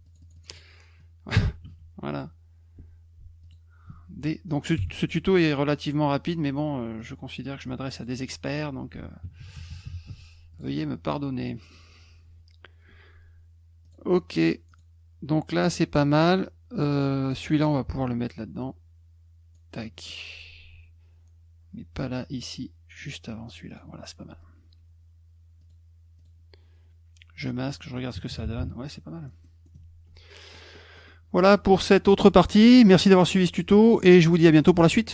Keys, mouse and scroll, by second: 0.0 click, 0.2 click, 0.3 click, 0.5 click, 1.0 click, 2.1 click, 3.4 alt+click, 4.7 d, 7.0 click, 7.6 F1, 7.9 click, 10.0 F1, 10.5 click, 10.9 click, 13.8 click, 14.7 click, 15.5 click, 16.7 click, 17.2 click, 18.0-19.5 drag, 22.0-22.9 drag, 23.7 click, 25.6 click, 26.2 click, 27.3 click, 27.6 click.